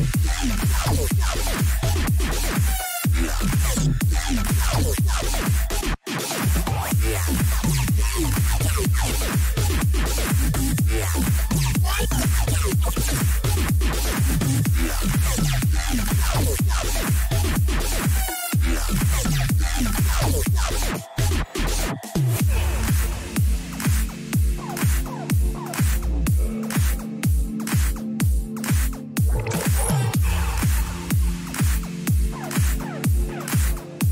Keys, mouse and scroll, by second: 0.4-1.7 middle drag, 4.4-6.3 drag, 8.1 a, 8.5-10.5 right drag, 9.3-14.1 drag, 10.9 a, 11.2-13.2 right drag, 14.5-16.3 middle drag, 16.3 a, 16.8 right click, 19.2-20.6 drag, 20.3-22.2 middle drag, 20.3 right click, 21.7 a, 22.2-24.3 right drag, 23.2-24.9 drag, 25.0 a, 25.6-27.8 right drag, 26.4-28.1 drag, 28.5-30.2 middle drag, 30.2 a, 30.5-31.8 middle drag, 32.2 Tab, 33.7 middle click.